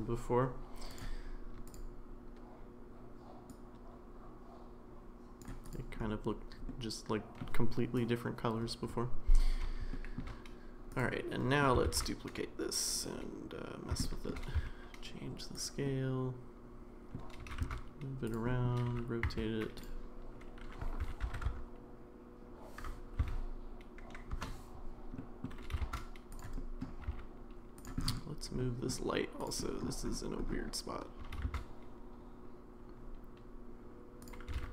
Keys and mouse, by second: 0.9 click, 1.7 click, 6.7-7.4 middle drag, 9.9 shift+middle click, 11.4 middle click, 11.9 shift+d, 14.0 shift+middle click, 14.9 s, 15.9-17.2 middle drag, 17.4 g, 18.5 middle click, 18.9 r, 21.0 r, 25.2 middle click, 25.6 g, 26.6 middle click, 27.0 g, 28.6-28.9 middle drag, 29.6 middle drag, 31.2 g, 34.5 g.